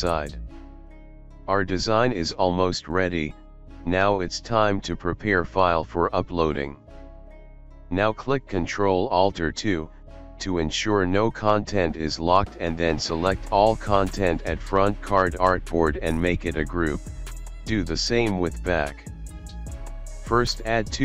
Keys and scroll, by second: 0.1 ctrl+shift+g, 1.4 Down, 1.5 Down, 1.6 Down, 4.7 alt+space, 6.0 space, 6.3 Up, 6.5 Up, 6.8 Up, 8.0 space, 10.2 alt+space, 10.8 space, 12.9 ctrl+g, 14.8 ctrl+g, 15.6 ctrl+z, 16.4 ctrl+z.